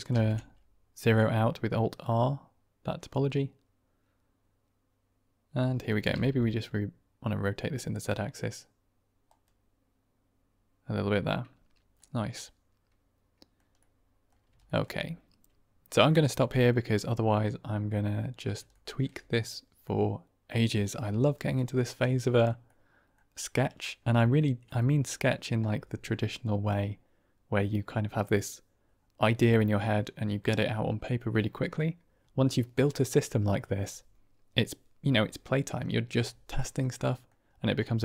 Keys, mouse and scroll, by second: 1.2 alt+r, 2.0-3.0 drag, 3.0-5.8 middle drag, 6.0 r, 8.7 z, 11.9-13.5 middle drag, 13.7-14.2 middle drag, 14.5 shift+middle drag, 16.2-16.7 middle drag, 18.6 shift+middle drag, 19.7-20.4 middle drag, 22.0-22.4 middle drag, 22.6-23.0 middle drag, 23.7-24.3 middle drag, 24.7-25.4 middle drag, 36.5-37.2 middle drag, 37.7-38.0 middle drag.